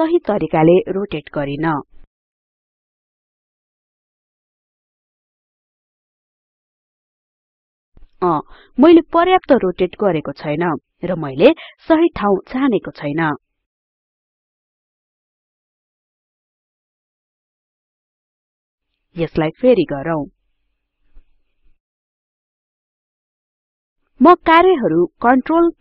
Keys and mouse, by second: 2.6-15.1 drag.